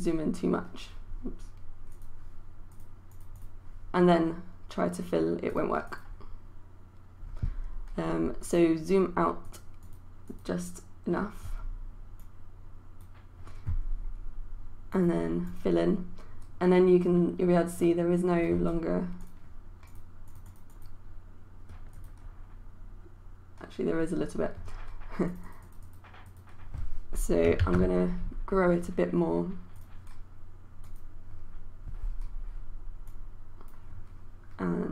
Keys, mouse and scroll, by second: 27.6 ctrl+z, 29.8-34.9 drag.